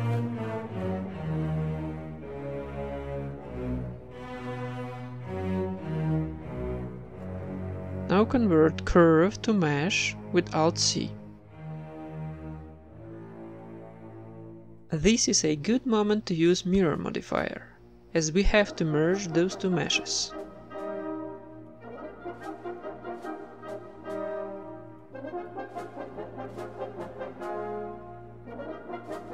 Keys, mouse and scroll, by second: 0.2 click, 0.2 right click, 0.9-3.6 typing, 1.2 Tab, 5.4 shift+z, 6.1 Tab, 7.8 alt+v, 8.3 alt+c, 10.6-12.4 middle drag, 11.1 s, 12.6 Tab, 12.8-14.5 middle drag, 15.5 middle click, 15.9 ctrl+r, 16.3-17.4 drag, 16.3 Tab, 16.9 ctrl+r, 17.4 Tab, 17.4-18.4 typing, 19.1 Tab, 20.0-22.7 drag, 22.7-24.3 middle drag, 22.8-25.8 typing, 24.1 Tab, 26.4 Tab, 27.1-29.2 right drag, 27.6 z, 28.6 ctrl+l.